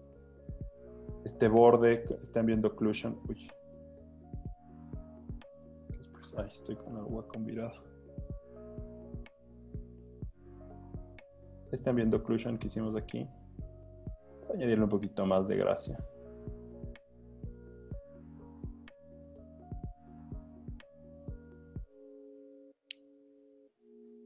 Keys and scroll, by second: 0.6 3, 3.1 super+z, 4.5 super+z, 5.1 super+z, 7.9 b, 23.0 z.